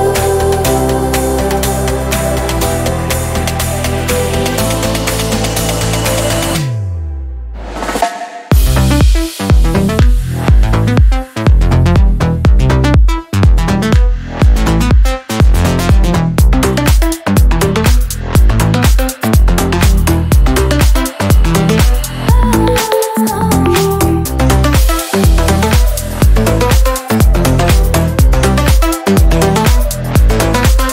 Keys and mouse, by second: 0.6-3.8 middle drag, 3.8 click, 4.4-5.5 middle drag, 5.5 ctrl+a, 9.8 ctrl+a, 14.5-15.8 middle drag, 15.8-17.6 drag, 18.8 click, 18.9 w, 21.6 click, 22.2 x, 22.6-24.1 drag, 25.8 click, 26.8 click, 28.2-28.8 drag, 29.7-30.9 drag.